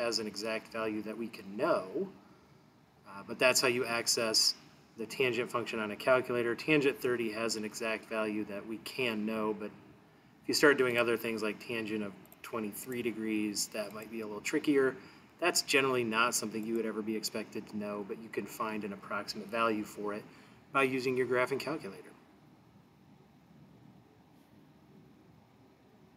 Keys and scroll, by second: 12.3 2, 12.9 3, 14.0 ), 16.7 Return.